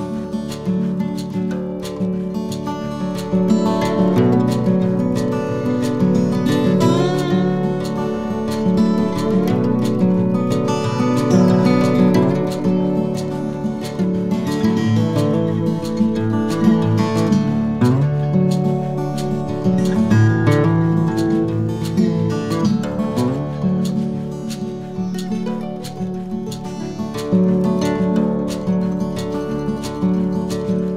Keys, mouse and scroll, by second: 2.4 s, 4.3 ctrl+a, 6.2 alt+c, 8.3 right click, 13.4 click, 13.6 middle click, 16.3 KP_3, 17.0-17.3 scroll down 2, 17.3 z, 18.5 Tab, 19.0 a, 19.4 a, 20.2 z, 21.1 b, 23.8 z, 24.5 b, 26.2 z, 27.7 click.